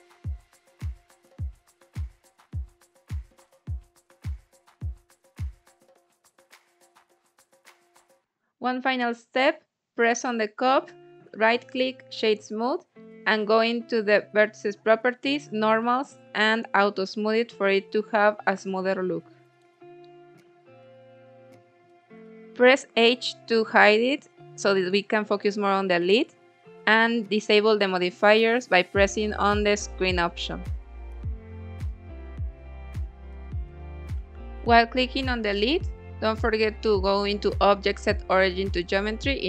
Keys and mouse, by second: 3.1 click, 4.5 click, 4.7-7.5 drag, 9.4 click, 11.1 click, 14.1 click, 15.5 click, 16.7 click, 17.6-19.4 middle drag, 22.3 click, 22.8 click, 23.7 h, 24.5 h, 24.9 click, 26.5 click, 27.5 click, 28.4 click, 29.1 middle click, 29.9 KP_1, 31.0 g, 31.2 z, 32.6 click, 33.0 s, 33.9 Escape, 34.9-36.3 drag, 37.3 s, 39.2 click.